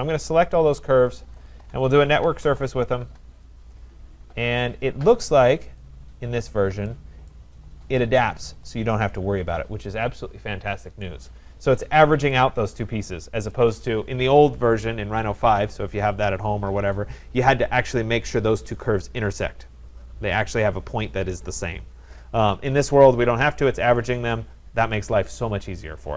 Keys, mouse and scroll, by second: 0.0 shift+click, 0.7 shift+click, 1.5 shift+click, 2.2-2.9 typing, 3.1 Return, 5.8 click, 6.4-6.7 scroll, 7.3 right click, 7.7-8.6 scroll, 11.0 right click, 11.7 scroll, 13.5 right click, 17.8 right click, 23.1 scroll, 24.2 right click, 25.2 scroll.